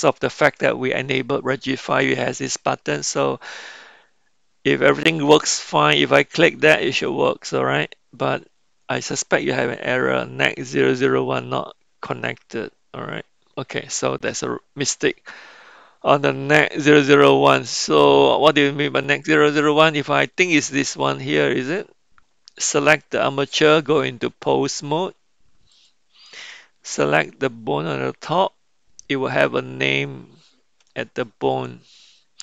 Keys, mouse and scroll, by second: 6.5-8.5 drag, 20.4 click, 24.8-26.1 drag, 27.1 click.